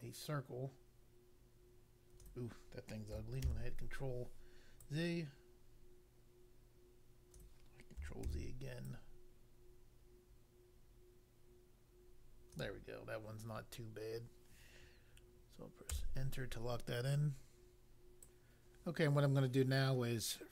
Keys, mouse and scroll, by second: 4.6 ctrl+z, 4.8 click, 8.2 ctrl+z, 8.8 click, 15.9 Return, 18.2 click.